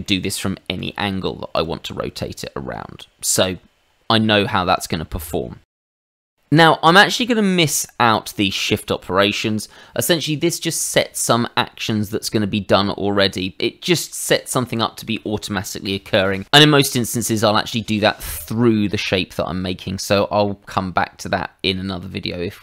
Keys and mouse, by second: 0.0 shift+middle click, 0.8 r, 1.5 click, 2.0 middle click, 6.0 ctrl+z, 6.5 click, 20.1 middle click.